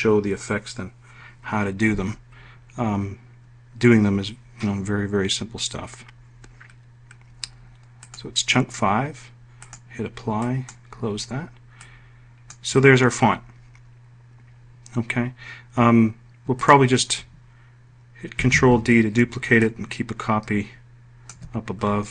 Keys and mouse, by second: 17.7 ctrl+d.